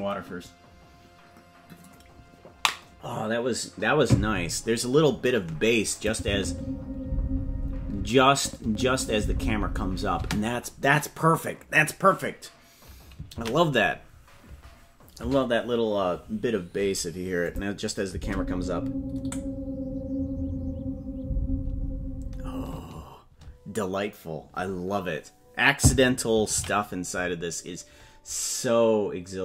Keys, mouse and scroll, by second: 5.9 click, 6.2 space, 7.9 space, 8.3 click, 8.6 space, 10.1 space, 15.5 ctrl+s, 17.4 click, 18.1 space, 22.7 space, 28.8 ctrl+s.